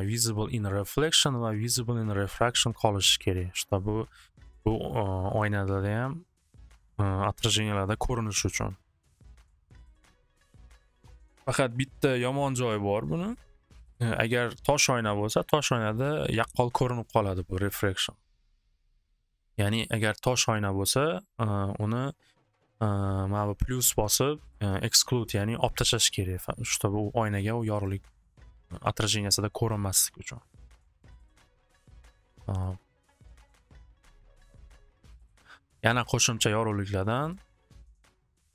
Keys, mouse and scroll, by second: 27.8 click, 29.7 click, 31.1 click, 32.6 click, 32.9 alt+w, 33.1 alt+w, 37.3 click, 38.2 click.